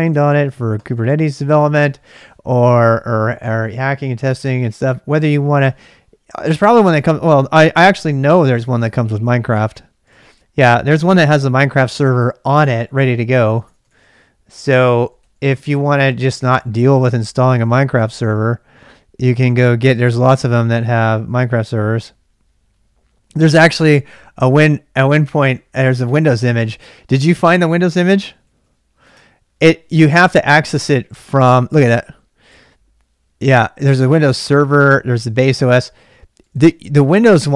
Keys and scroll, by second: 0.0-1.0 typing, 0.1 ctrl+[, 5.4 k, 5.6 k, 7.8 super+Tab, 12.0-16.2 typing, 28.0-29.1 typing, 32.8 typing.